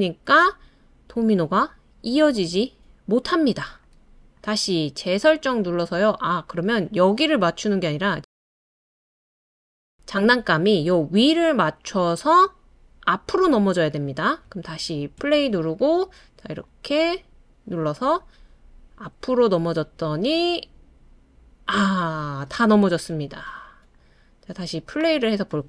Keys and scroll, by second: 15.2 space.